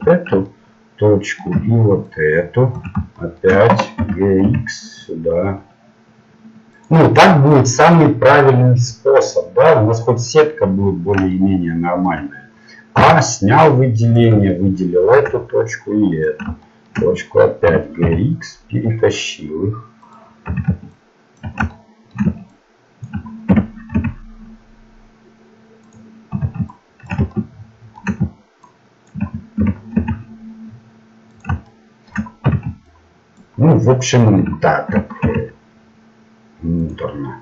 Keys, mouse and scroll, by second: 0.0-1.5 drag, 2.7-4.0 drag, 4.0 g, 11.3-13.3 middle drag, 13.0 a, 14.2-17.7 drag, 14.5-16.3 middle drag, 17.7 g, 20.6 a, 21.5-24.3 drag, 23.5 g, 26.3 a, 27.1-30.5 drag, 29.6 g, 31.7 middle click, 32.6 a, 33.5-36.1 drag, 34.9 g.